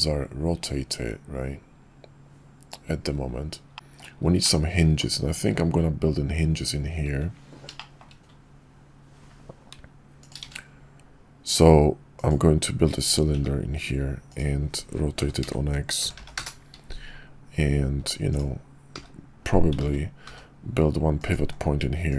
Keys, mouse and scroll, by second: 3.7 middle click, 4.4-5.0 middle drag, 7.7 shift+middle drag, 10.5 shift+a, 13.3 g, 15.2 r, 17.8 s, 19.0 h, 19.8 ctrl+z, 20.2 g, 21.4 s.